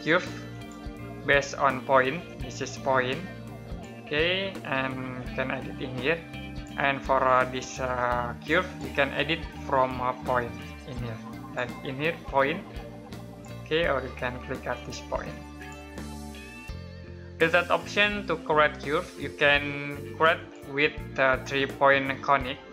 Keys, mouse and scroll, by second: 0.3 click, 18.1 middle click, 20.1 click.